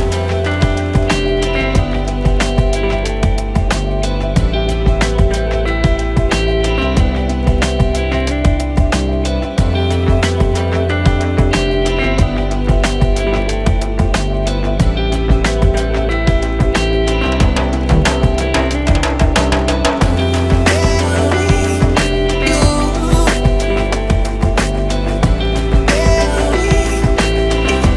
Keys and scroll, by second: 1.1 Escape, 1.2 d, 1.7 3, 1.8 Return, 8.3 Escape, 8.4 d, 9.2 3, 10.2 BackSpace, 10.3 4, 10.4 Return, 13.7 Escape, 14.5 Escape, 14.6 d, 15.0 3, 15.1 Return, 15.7 4, 15.7 Return, 17.8 Escape, 19.3 Escape, 19.6 d, 20.2 3, 20.3 Return, 22.3 Escape, 22.4 d, 23.3 3, 23.4 Return, 24.7 Escape.